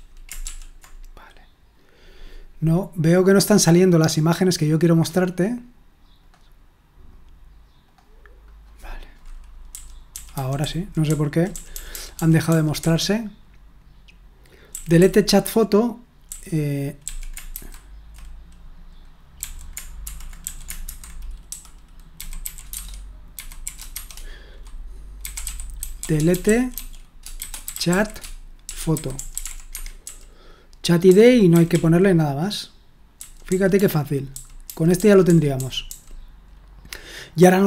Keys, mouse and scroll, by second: 8.4 click, 9.7-10.6 typing, 11.7 j, 12.4 j, 12.8 j, 14.7 typing, 16.3-17.5 typing, 19.4-31.7 typing, 33.2-34.3 typing, 37.1-37.6 typing.